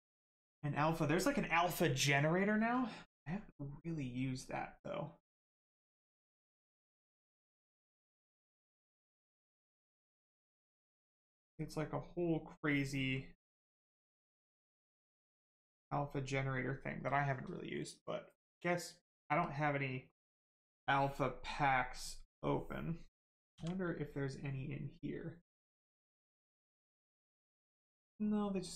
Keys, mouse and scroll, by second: 5.4 click, 8.1 click, 11.6 click, 15.4 click, 19.4 click, 25.9 click.